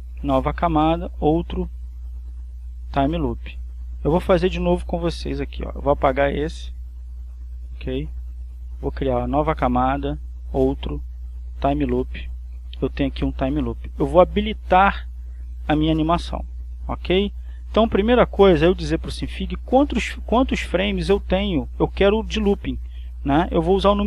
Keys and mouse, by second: 4.1 click, 4.9 click, 6.8 click, 8.1 click, 8.5 right click, 11.7 click, 15.0 click.